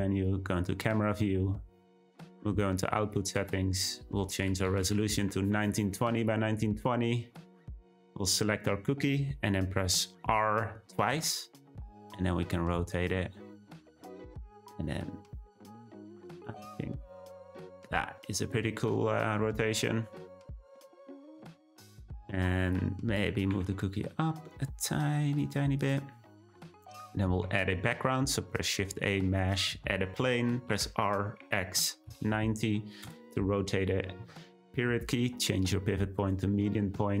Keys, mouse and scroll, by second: 1.9 click, 3.0-6.4 drag, 7.3 drag, 10.9 r, 18.3-19.3 scroll down 3, 20.8 click, 22.7 click, 23.4 g, 25.8 click, 27.4 shift+a, 30.7 r, 34.7 ., 36.7-37.2 middle drag.